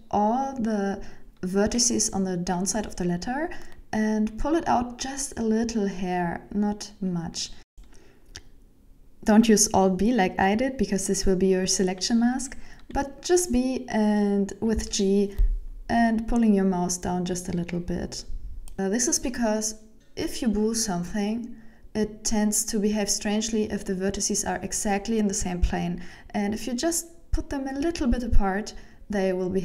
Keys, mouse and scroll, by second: 1.6 shift+middle click, 1.9 Tab, 2.5 right click, 2.8 scroll down 4, 3.1 shift+middle click, 3.7 middle click, 4.4 right click, 5.2 KP_1, 5.7 Tab, 6.2-6.6 scroll up 3, 6.9 alt+b, 10.3 right click, 11.0 alt+b, 12.5 b, 14.5 g, 15.8 shift+middle click, 16.3 Tab, 16.7 right click, 17.4 Tab, 18.3 b, 19.8 g, 22.7 shift+middle click, 23.2 Tab, 23.6 right click, 24.0 shift+middle click, 24.4 Tab, 25.1 b, 26.7 g, 28.4 shift+middle click, 28.9 Tab, 29.1 right click, 29.5 Tab.